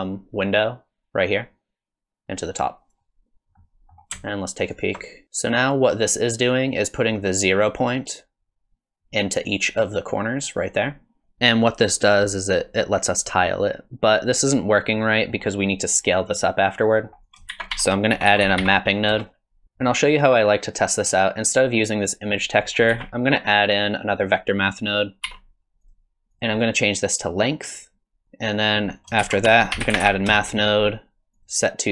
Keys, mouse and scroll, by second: 3.6 middle click, 4.7 ctrl+shift+click, 11.2 ctrl+shift+click, 15.1 middle click, 17.0 middle click, 17.2 click, 17.5 shift+a, 18.6 p, 19.6 middle click, 22.0 click, 22.6 click, 22.9 shift+a, 24.2 click, 25.2 click, 25.3 shift+d, 26.3 click, 28.2 ctrl+shift+click, 28.5 click, 29.0 click, 29.2 shift+a.